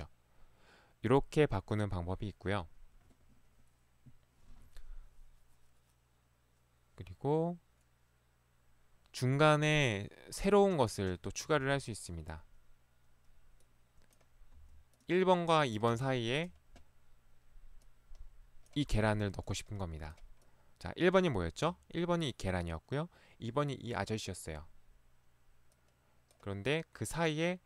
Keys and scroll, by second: 11.6 Escape, 14.7 Escape.